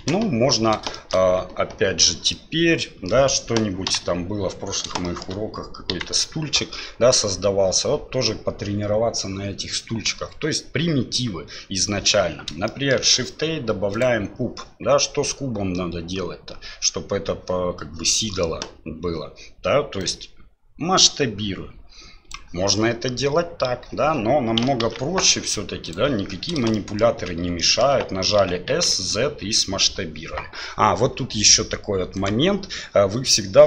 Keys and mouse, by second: 0.0 KP_1, 0.9 shift+click, 2.3-3.1 drag, 3.9 Delete, 5.0 shift+drag, 5.9 KP_1, 12.7 shift+click, 13.0 shift+a, 20.0-22.3 drag, 24.8 ctrl+z, 25.8 right click, 26.7 shift+right click, 27.6 shift+right click, 28.4 s.